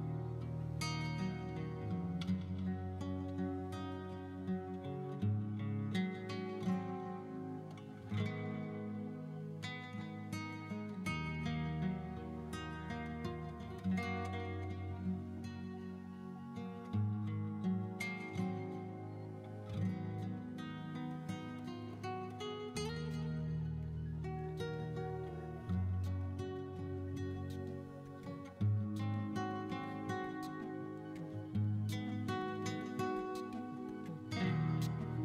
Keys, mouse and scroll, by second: 0.1 x, 0.7 shift+a, 1.4 scroll up 2, 1.5 middle drag, 1.8 right click, 2.0 scroll up 2, 2.0 middle drag, 2.9 Tab, 3.7 g, 3.9 z, 4.1 1, 4.4 KP_Enter, 4.7 middle click, 5.0 shift+middle click, 5.2 scroll down 2, 5.2 middle click, 5.3 middle click, 5.8 click, 6.0 s, 6.5 click, 6.6-7.0 scroll up 3, 6.8 middle click, 7.0 scroll down 2, 7.1 shift+middle click, 7.3 scroll up 1, 7.5 s, 7.6 shift+z, 8.2 click, 8.7 s, 8.8 z, 9.0 middle click, 9.3 shift+middle click, 9.4 middle click, 9.6 scroll up 3, 9.7 middle click, 10.3 middle click, 10.7 middle click, 10.9 shift+middle click, 11.3 middle click, 11.6 shift+middle click, 12.1 middle click, 12.7 middle click, 13.1 scroll down 1, 13.3 middle click, 14.2 shift+middle click, 14.6 Tab, 15.0 click, 16.2 w, 17.5 click, 18.3 scroll down 2, 18.4 shift+middle click, 19.0 click, 19.9-20.6 drag, 20.9 middle click, 21.0 shift+middle click, 22.6 shift+a, 22.9 middle click, 23.1 right click, 23.3 click, 23.8 middle drag, 24.0 shift+middle click, 24.0 scroll down 1, 24.8 click, 25.7 middle drag, 25.8 scroll up 2, 25.9 middle click, 26.1 scroll down 1, 26.5-27.7 drag, 28.1 middle click, 28.4 Tab, 28.7 middle click, 29.0 ctrl+e, 29.3 right click, 29.6 ctrl+r, 30.4 right click, 31.5 s, 31.5 y, 32.1 click, 32.3 ctrl+r, 32.7 right click, 33.1 s, 33.1 x, 33.4 click, 33.8 ctrl+r, 34.0 right click, 34.3 s, 34.3 z, 34.6 right click, 34.8 click.